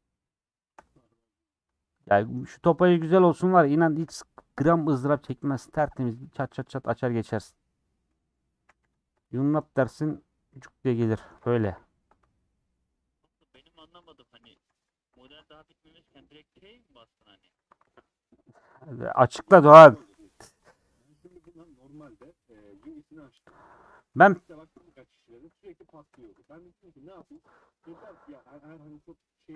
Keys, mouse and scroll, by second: 1.5 click, 3.0 shift+click, 3.7 shift+click, 4.5 ctrl+click, 5.0-6.5 middle drag, 6.5 click, 7.1 click, 7.5-8.5 middle drag, 8.5 a, 9.0 u, 10.4 middle click, 10.9 scroll down 3, 11.0 middle click, 11.4 middle click, 12.1 scroll down 4, 12.4-14.0 middle drag, 14.0 /, 14.5 Tab, 14.7 h, 14.8 click, 15.3 Tab, 16.0 /, 16.5 middle click, 17.5 3, 17.9-19.7 middle drag, 19.7 2, 20.0 1, 20.1 middle click, 20.7 alt+z, 21.3 alt+z, 21.6 middle click, 22.0 alt+z, 22.6 click, 22.8 alt+z, 23.3 alt+z, 27.9 2.